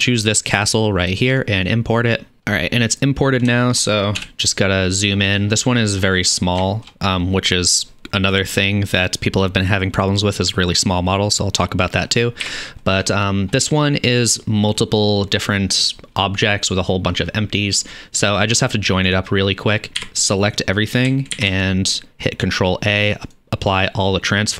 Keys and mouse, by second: 4.2 KP_Decimal, 12.4 n, 16.0-21.5 middle drag, 20.0 a, 21.4 ctrl+a.